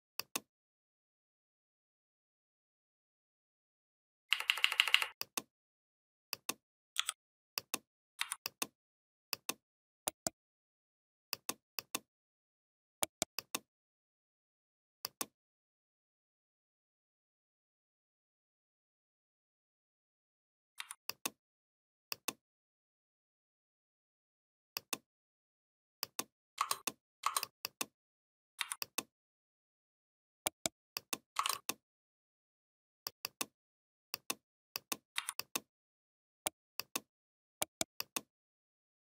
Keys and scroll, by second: 4.1 Up, 6.8 i, 8.0 v, 20.6 v, 28.4 v, 35.0 v.